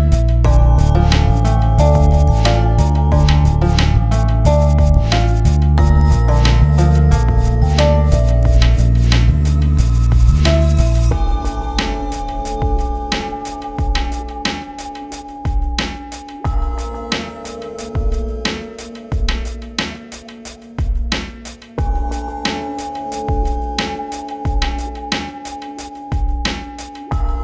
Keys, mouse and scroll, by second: 0.9 scroll down 1, 1.4 click, 5.5 click, 8.4 click, 9.8 click, 10.0 ctrl+s, 10.3 click, 11.2 click, 12.1 scroll down 1, 13.2 scroll up 1, 13.7 click, 14.0 scroll down 1, 14.4 click, 15.2 scroll up 1, 16.2-17.9 drag, 17.9 scroll up 1, 18.4-20.4 drag, 20.4 scroll down 1, 20.9 F4, 21.7-26.6 drag, 26.6 scroll up 1.